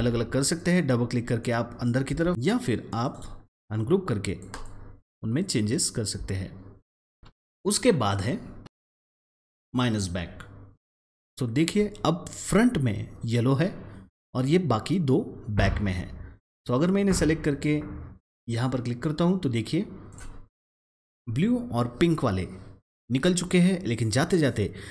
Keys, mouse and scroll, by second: 0.5 click, 0.7 double click, 1.3 click, 2.2 ctrl+z, 2.3 click, 3.0 right click, 4.2 click, 4.4 double click, 5.2-7.3 drag, 7.3 ctrl+z, 11.2 ctrl+z, 20.0 click.